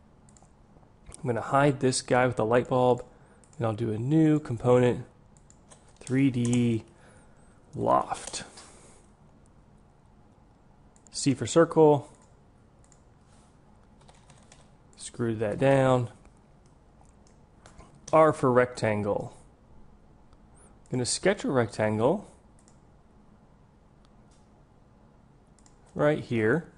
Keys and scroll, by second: 11.2 c, 18.5 r.